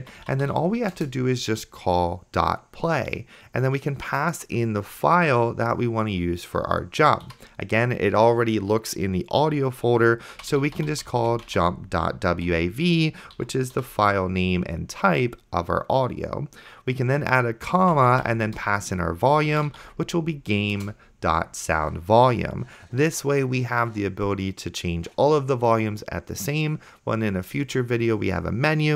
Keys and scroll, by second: 0.0-1.0 typing, 7.7 ', 10.1-12.0 typing, 12.5 Right, 13.4 End, 13.8 ;, 14.5 Left, 17.1-20.4 typing, 20.8 Return.